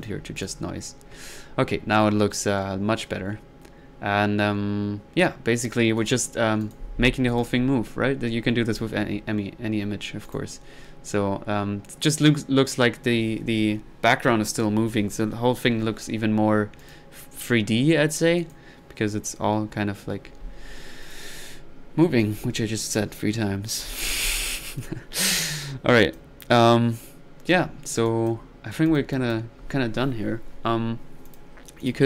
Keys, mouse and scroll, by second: 0.0 click, 0.4 click, 0.7 click, 0.9 click, 6.0 click, 7.3 click, 10.3 click, 16.8 click, 18.4 click, 21.0 drag, 22.2-24.4 drag, 24.6-25.2 drag, 27.5 right click, 28.2 click, 28.6 middle click, 28.9 click, 30.5 middle click, 31.3 click, 31.8 click.